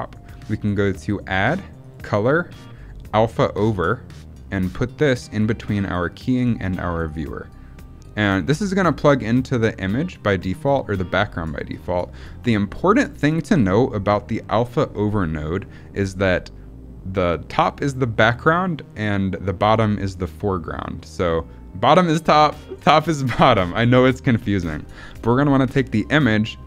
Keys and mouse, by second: 0.9-7.0 drag, 11.8 middle click, 12.9 middle click, 24.5 middle click, 25.0 middle click.